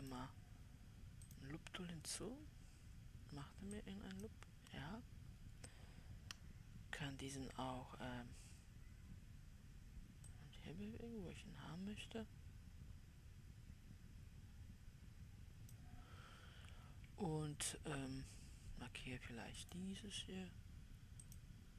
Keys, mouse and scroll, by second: 0.6-21.7 drag.